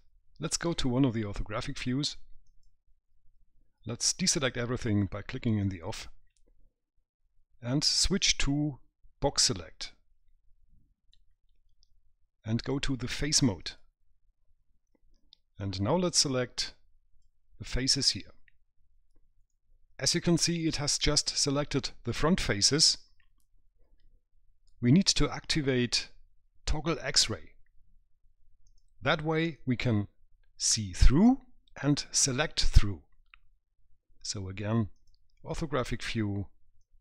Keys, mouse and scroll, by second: 2.7 click, 5.1 click, 8.4 click, 13.9 click, 15.8 click, 19.7 right click, 28.9 click, 35.2 click.